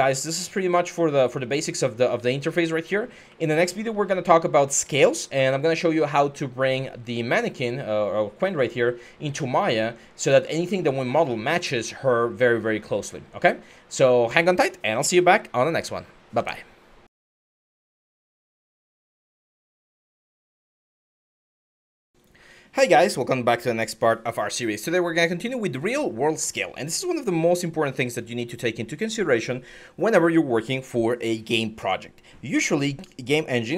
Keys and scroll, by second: 0.0-6.3 typing, 9.3-13.4 typing, 16.1 Escape, 27.2-29.1 typing, 32.7-33.7 typing.